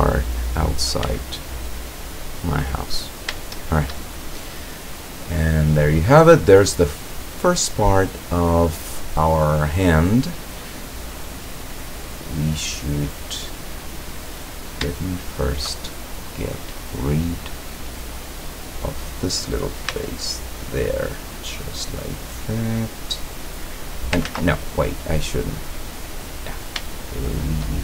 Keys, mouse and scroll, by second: 0.0 click, 0.7 right click, 1.1 x, 1.8 click, 2.4 scroll down 1, 3.0 scroll down 1, 3.5-4.1 shift+middle drag, 4.5-6.0 drag, 6.1-6.5 scroll down 1, 8.3-10.8 drag, 11.8-14.3 drag, 14.8 shift+scroll up 1, 15.0-17.0 shift+drag, 17.1-17.6 scroll up 1, 18.5 right click, 20.0 x, 20.6 click, 21.6 scroll down 1, 22.1-23.3 middle drag, 23.4 scroll down 1, 24.3 ctrl+z, 24.7-26.0 ctrl+middle drag, 27.0-27.8 shift+drag.